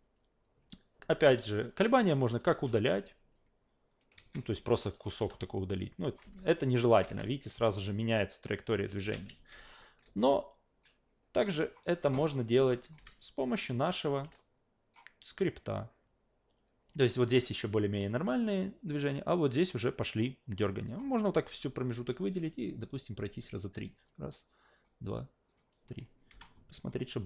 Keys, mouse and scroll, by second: 1.7 click, 2.4 Delete, 4.2 ctrl+z, 4.6-5.0 drag, 5.2 Delete, 5.8-6.1 drag, 6.2 alt+v, 7.0 alt+v, 7.3 click, 7.5 alt+v, 9.0 alt+v, 9.3 ctrl+z, 9.5 ctrl+z, 10.2-10.8 alt+right drag, 11.6 click, 12.8 click, 13.0 f, 14.1 click, 14.4-14.9 alt+right drag, 17.1 drag, 17.9 click, 18.9-20.9 drag, 23.9 click, 24.7 click, 25.5 click, 26.3 f, 26.8 click.